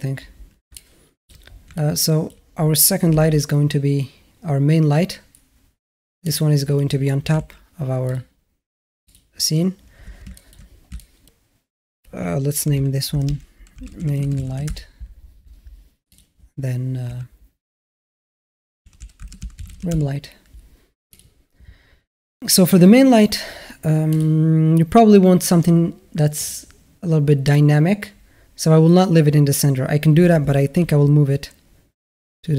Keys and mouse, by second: 0.5-1.1 alt+middle drag, 1.6-2.1 alt+middle drag, 3.0 shift+a, 7.1 g, 8.9 click, 10.1 shift+a, 10.2 middle drag, 10.7 shift+a, 10.8 shift+middle drag, 12.0 click, 13.1 BackSpace, 16.0 click, 16.9 F2, 20.9 click, 23.9 click, 26.2 click, 30.6 g.